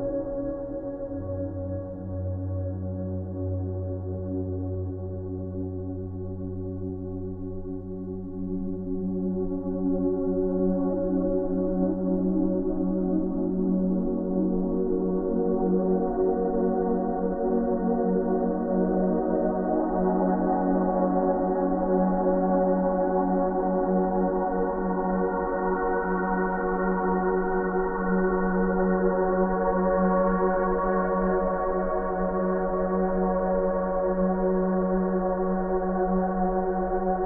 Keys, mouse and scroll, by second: 3.6 click, 3.6 click, 6.6 click, 6.7 click, 10.3 space, 10.4-11.1 ctrl+click, 11.6-11.9 click, 12.8 o, 14.5 right click, 15.0 click, 15.9 ], 16.3 ], 16.5 ], 17.0-17.6 drag, 21.8 click, 24.8 space, 25.0 click, 25.3 space, 25.9-27.4 alt+drag, 29.2 space, 29.3 right click, 29.5 click, 30.5 space, 30.6 click, 31.0 space, 31.6 click, 34.4 space, 34.5 right click, 34.8 click, 35.3 v, 35.4 v, 35.8 ctrl+space, 36.0 ctrl+click, 36.3 ctrl+space.